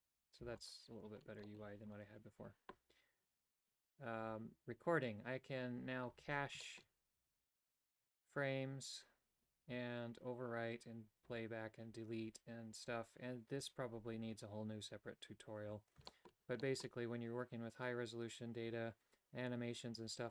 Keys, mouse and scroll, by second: 0.5 x, 1.5 middle click, 2.0 right click, 6.6 shift+middle click, 16.2 shift+middle click, 16.6 middle click.